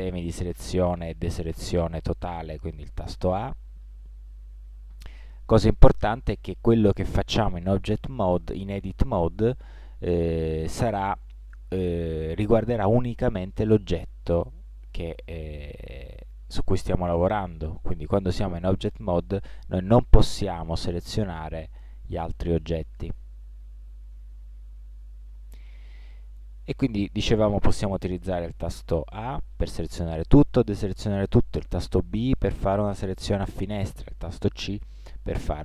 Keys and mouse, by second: 1.3 a, 1.8 a, 3.4 a, 3.9 a, 4.5-7.1 middle drag, 8.4-11.0 middle drag, 18.8 middle click, 19.3 a, 20.1-22.3 right drag, 26.0-28.1 middle drag, 29.2 a, 30.1 a, 31.5 b, 33.4-34.7 middle drag, 34.7 c, 34.9 middle click.